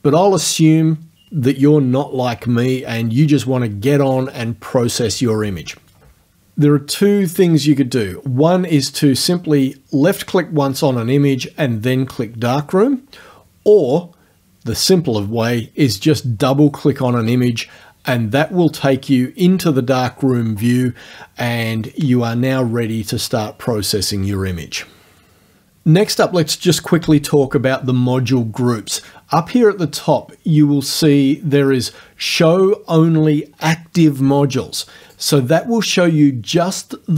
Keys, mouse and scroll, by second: 8.7 click, 17.2 click, 35.1 click.